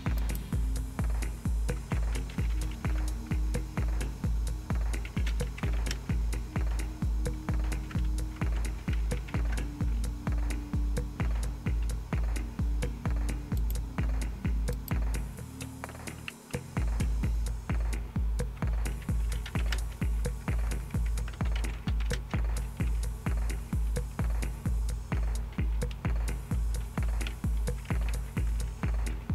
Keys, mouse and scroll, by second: 0.2 click, 1.9-3.2 typing, 3.2 Return, 4.8-9.9 typing, 13.6 right click, 14.7 click, 16.5-18.5 Left, 18.9-29.3 typing, 23.4 Right, 23.8 Right.